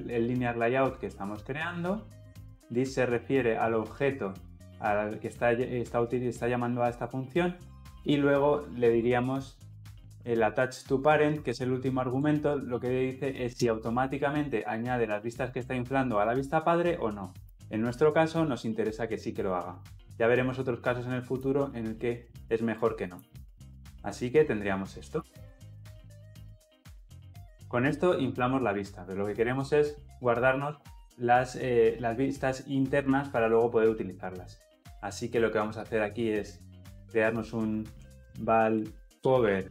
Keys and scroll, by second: 11.3 ctrl+p, 18.6 Return, 25.9 ctrl+alt+l, 26.1 ctrl+alt+o.